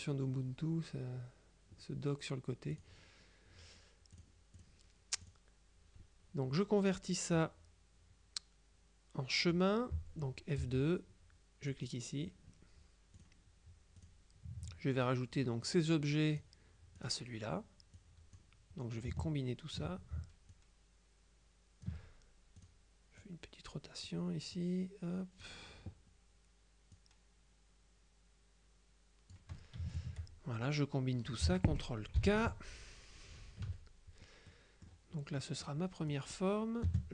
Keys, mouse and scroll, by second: 2.8 click, 4.3 click, 5.3 click, 10.7 F2, 11.8 click, 13.3 click, 14.1 click, 15.7-17.0 drag, 17.1 click, 18.1 click, 19.1 ctrl+click, 20.6-22.4 drag, 22.7 click, 23.2-24.6 middle drag, 27.1 click, 30.0 shift+click, 32.3 ctrl+k, 33.7 KP_Subtract, 34.5 click, 35.5 click, 36.2 right click, 36.9 space.